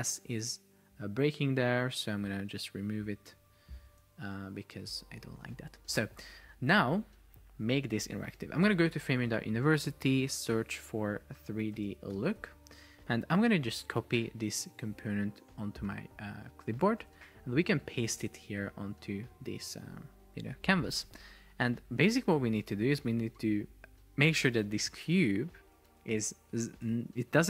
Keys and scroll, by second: 4.3 super+Right, 4.8 BackSpace, 5.0 Return, 8.8 alt+f, 9.1 super+o, 11.9 space, 17.2 super+Tab, 18.4 super+v.